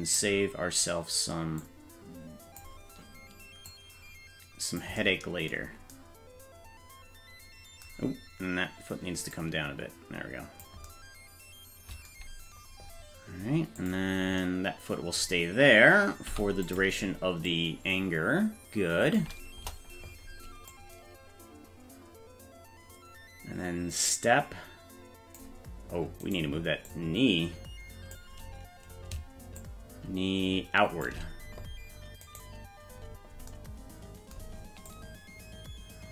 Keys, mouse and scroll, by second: 1.6-2.6 drag, 3.7-4.8 drag, 9.3-10.6 drag, 13.8 click, 16.3 i, 17.5-19.2 drag, 19.6 KP_0, 20.7-25.4 drag, 26.3 right click, 26.9-28.2 drag, 29.6-31.1 shift+drag, 32.3 right click, 34.9-36.1 drag.